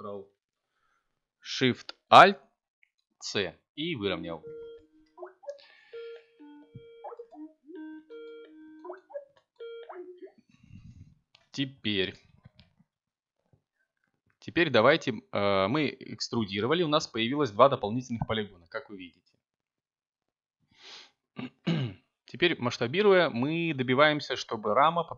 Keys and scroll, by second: 13.4 s, 14.2 z, 20.6 a, 24.9 c.